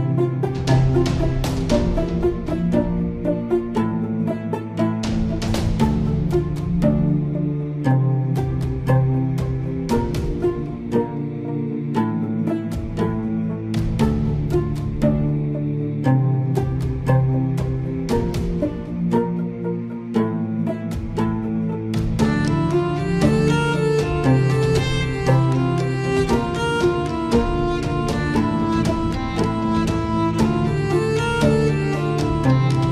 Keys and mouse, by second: 1.1 ctrl+KP_Add, 2.0 middle click, 5.4 ctrl+KP_Add, 10.6-11.8 middle drag, 11.8 middle click, 17.4 middle click, 18.3 middle click, 21.1-23.1 drag, 24.1 middle click, 25.2 shift+middle click, 28.1-30.5 shift+drag.